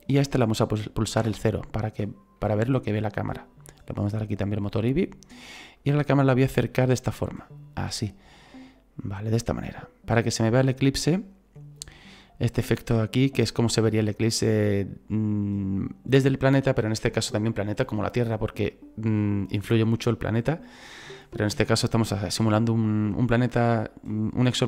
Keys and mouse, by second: 1.2 KP_0, 4.1 click, 5.8 click, 14.2 click, 18.8 click.